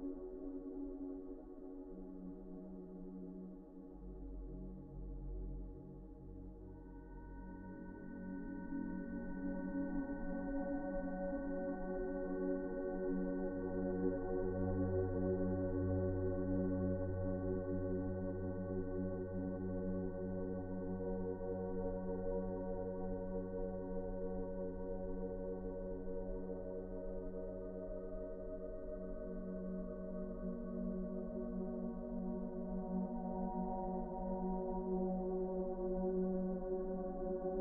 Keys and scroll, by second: 7.6 F4, 17.9 z, 36.7 Delete.